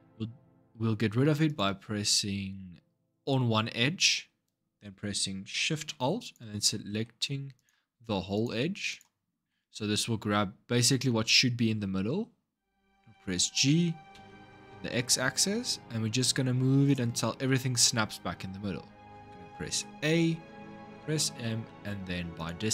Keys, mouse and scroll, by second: 1.3 click, 3.5-6.0 scroll up 1, 6.0 alt+shift+click, 7.3 click, 8.1 alt+shift+click, 8.7 alt+shift+click, 12.8 g, 19.5 a, 20.7 m.